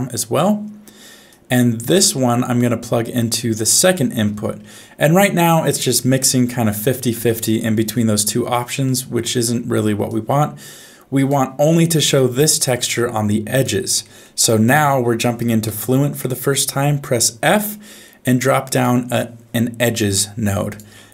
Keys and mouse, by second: 1.4 click, 2.9 click, 8.9 middle click, 10.3 click, 12.1-13.6 drag, 14.1 middle click, 14.6 click, 15.7 f, 20.2 click.